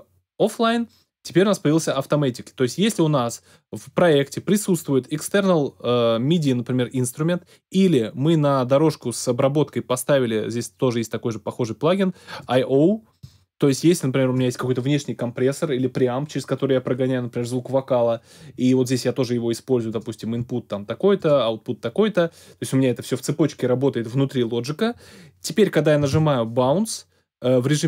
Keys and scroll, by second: 26.1 super+b.